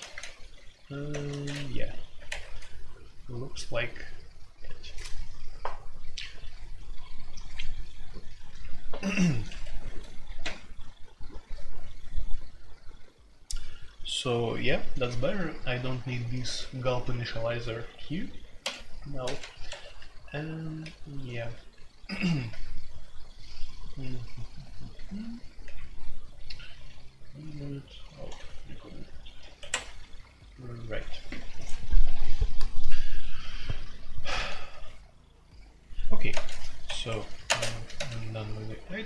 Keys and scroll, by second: 0.0-2.8 typing, 1.4 Escape, 9.4 Escape, 15.0-17.3 typing, 18.6-21.8 typing, 19.6 Escape, 24.5-26.1 typing, 28.2 shift+a, 29.5 Escape, 36.3-37.9 typing, 36.8 Escape, 37.0 Escape, 37.2 F2.